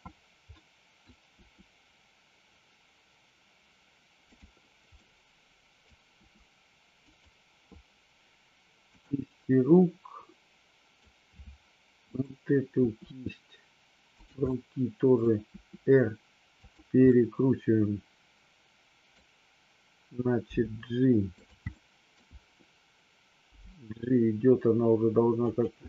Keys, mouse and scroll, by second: 0.5 middle click, 1.4 r, 4.2 click, 4.9-5.8 middle drag, 6.2 r, 7.0 click, 8.8-9.7 drag, 9.8-11.0 middle drag, 12.2-12.9 drag, 12.9 r, 14.4-15.2 middle drag, 15.4 r, 16.5 click, 17.2-19.0 middle drag, 20.5 g, 21.3 click, 21.7 scroll up 1, 21.8 middle drag, 22.0 scroll down 1, 23.4 g, 25.4 click, 25.8 scroll up 1.